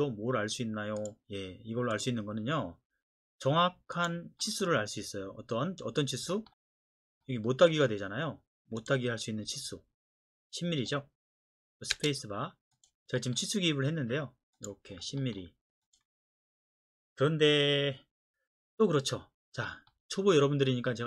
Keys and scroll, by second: 11.9 space.